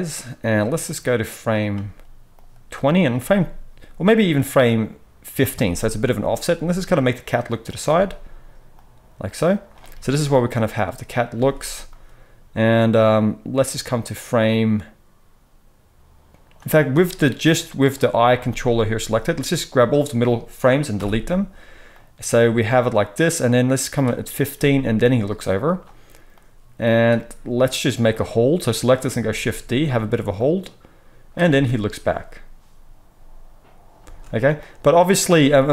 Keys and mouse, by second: 0.5-7.7 drag, 6.5 g, 7.7-8.7 middle drag, 8.7-18.0 drag, 9.8 space, 11.3 space, 18.0-19.4 middle drag, 19.4-25.7 drag, 20.9 Delete, 24.5 g, 25.7-26.3 middle drag, 26.3-29.9 drag, 29.2 shift+d, 29.9-30.3 middle drag, 30.3-35.7 drag, 31.5 space, 33.9 space, 35.4 g.